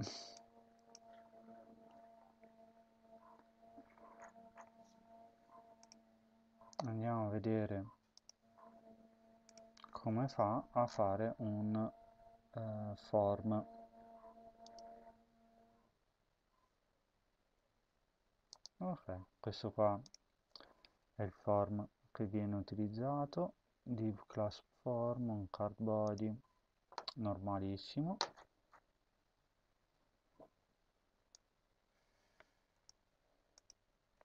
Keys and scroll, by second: 0.8 ctrl+v, 1.4 ctrl+s, 32.8 ctrl+c.